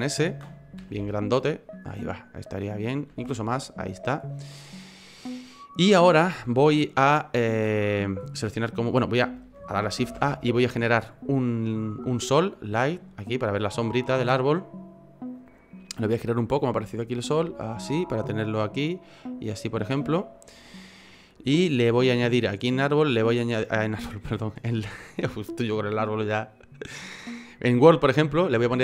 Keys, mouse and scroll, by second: 0.1-0.8 scroll down 1, 0.8 scroll down 3, 0.8 s, 1.9 middle click, 3.1 s, 4.0 middle click, 4.5 scroll up 1, 4.8 middle click, 5.6-6.0 scroll up 1, 6.0 middle click, 10.0 shift+a, 13.0 middle click, 15.4 click, 16.7 click, 20.2 click, 20.2 middle click, 22.4 click, 28.1 click.